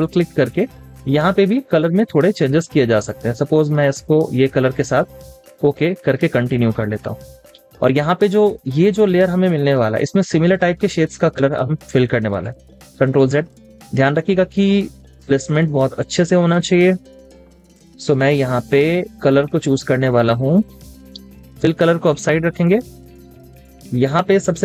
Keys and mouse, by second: 0.0 double click, 13.1 ctrl+click, 13.3 ctrl+z, 15.4 ctrl+z, 16.0 z, 18.3 typing, 20.0 double click, 20.7 space, 20.9 double click, 21.4 v.